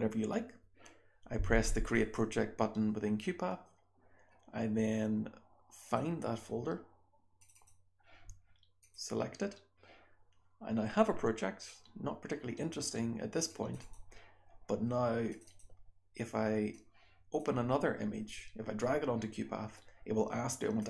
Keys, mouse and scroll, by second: 1.9 click.